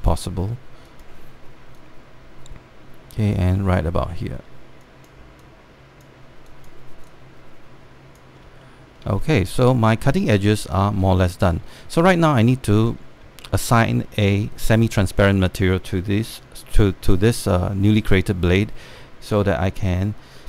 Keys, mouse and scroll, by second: 0.8 alt+middle click, 1.6-4.1 drag, 4.3 alt+middle click, 4.8 alt+middle click, 5.5-9.0 drag, 9.3 alt+middle click, 10.1 alt+middle click, 10.8 scroll up 1, 11.1 alt+middle click, 12.1 alt+middle click, 12.4 scroll down 1, 12.6 alt+middle click, 13.2 scroll down 1, 13.4 middle click, 13.9 scroll down 1, 14.1 alt+middle click, 14.4 right click, 15.4 click, 16.0 alt+middle click, 16.7 alt+middle click, 18.0 alt+middle click, 18.5 scroll down 1, 18.8 alt+middle click.